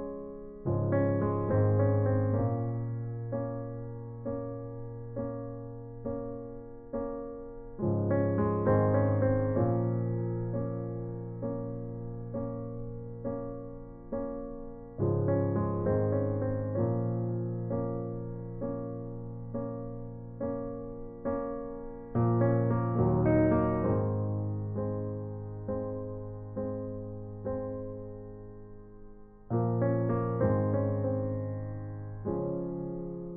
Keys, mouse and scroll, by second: 0.9 middle click, 2.9 middle click, 4.4 click, 5.4-8.6 drag, 13.1-16.1 middle drag, 18.5 shift+a, 22.3-23.9 drag, 24.8 r, 27.0 KP_1, 28.5-30.1 drag, 30.6 s, 32.7 middle click.